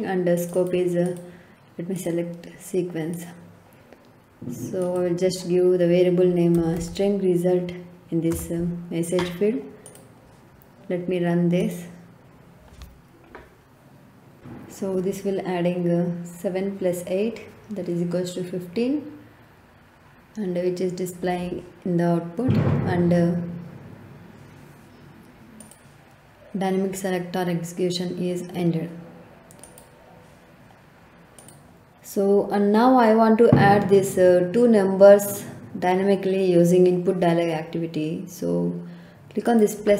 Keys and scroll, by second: 6.8 t, 8.2 Return.